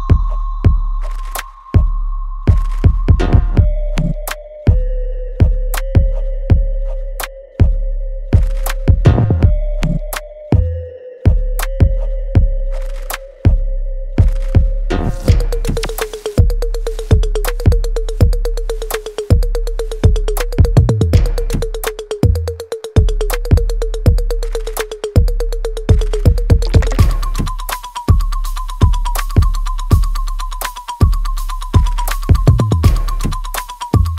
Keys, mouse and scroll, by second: 2.8 right click, 4.0 space, 5.6 click, 5.8-8.3 alt+drag, 8.3 alt+middle click, 9.3 space, 10.6 click, 10.9 right click, 11.8-14.2 drag, 14.2 space, 15.1-17.6 alt+drag, 17.6 right click, 17.6 right click, 18.3 middle click, 18.9 alt+middle click, 19.5 click, 19.8 right click, 20.3-23.1 alt+drag, 23.1 alt+middle click, 23.5-26.0 alt+right drag, 26.0-28.3 drag, 28.3 shift+right click, 29.7-31.3 ctrl+right drag, 32.0-33.4 alt+drag.